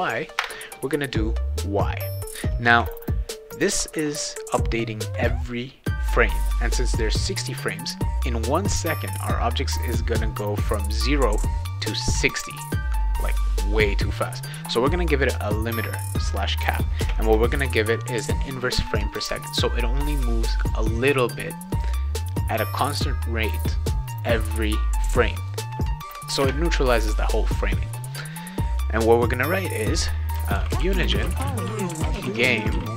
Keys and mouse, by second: 0.4 Return, 11.0 click, 13.4 click, 17.0 space, 17.5 shift+8, 26.4 space, 30.3-32.9 typing.